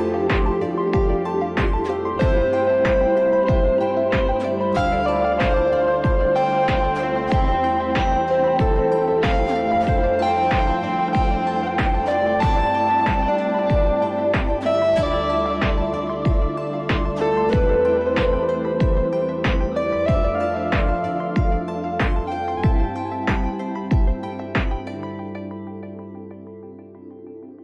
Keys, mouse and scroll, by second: 1.2 click, 3.4 click, 4.6 click, 6.6 click, 8.1 click, 9.1 click, 10.3 click, 10.9 click, 15.4 click, 16.2 click, 17.0 click, 18.0 click, 18.9-19.4 scroll, 19.5-20.3 scroll, 20.5 click, 21.4-22.6 scroll, 22.6-23.5 scroll, 23.6 click, 23.6-24.1 scroll up 3, 24.4-25.2 scroll down 3, 25.2-26.0 scroll down 2, 26.0 scroll up 1, 27.0 click.